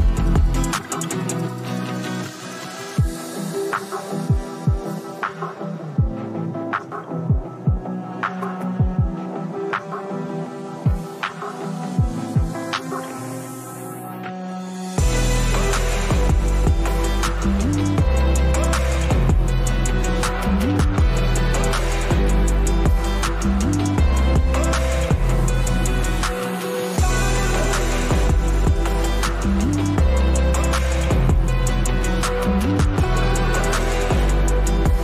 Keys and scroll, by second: 0.4 space, 5.2 ], 5.9 ], 9.5 space, 13.1 space, 17.5 space, 20.9 space, 21.4 space, 22.5 space, 32.4 space.